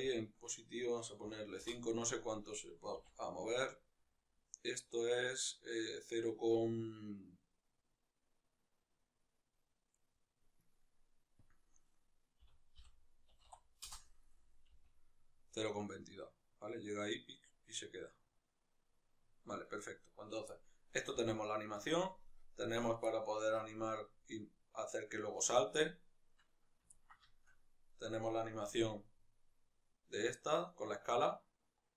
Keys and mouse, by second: 1.5 Return, 1.5-10.0 drag, 10.0 right click, 13.7 Return, 13.7-19.5 drag, 19.5 right click, 20.3-21.7 middle drag, 21.0 g, 21.7 click, 22.0 right click, 22.8-25.4 middle drag, 23.5 g, 25.4 right click, 25.5-27.7 middle drag, 27.7 right click, 28.5 s.